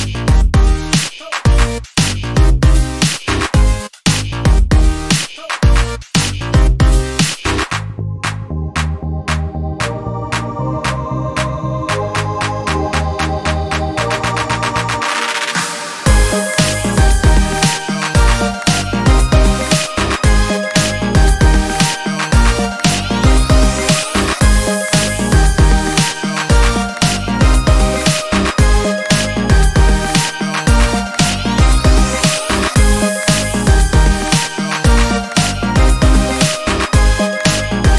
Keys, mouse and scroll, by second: 0.9-2.4 shift+drag, 3.1 click, 4.0 click, 4.6-5.0 ctrl+scroll down 2, 5.9 ctrl+KP_5, 7.3-7.7 ctrl+scroll up 2, 8.4 ctrl+scroll up 2, 11.7 middle click, 11.8 click, 12.1 middle click, 12.1-13.6 drag, 14.1 KP_5, 19.2 click, 19.9-21.2 drag, 21.2 scroll down 1, 23.9-25.7 drag, 26.5 shift+click, 28.2-29.8 ctrl+shift+drag, 32.1 click, 33.0-33.5 ctrl+scroll up 4.